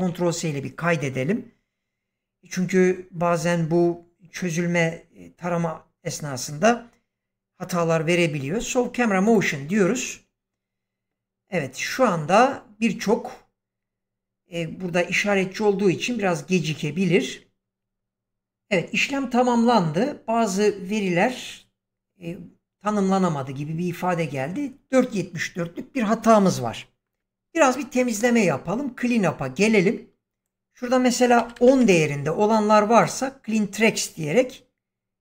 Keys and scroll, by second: 31.3 typing, 31.6 Return.